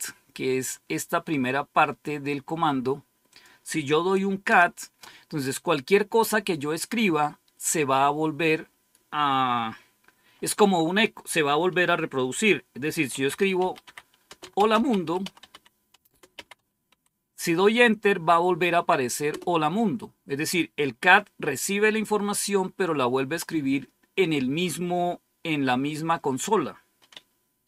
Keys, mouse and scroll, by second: 3.2 click, 4.4 Return, 12.8-17.3 typing, 19.2 Return.